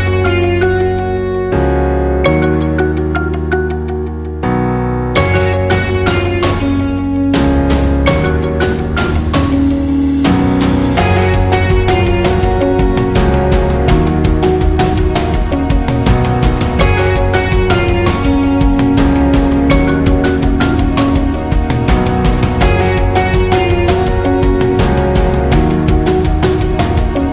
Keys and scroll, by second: 17.1 ctrl+alt+shift+j, 20.8 ctrl+alt+shift+j, 24.3 ctrl+alt+shift+j.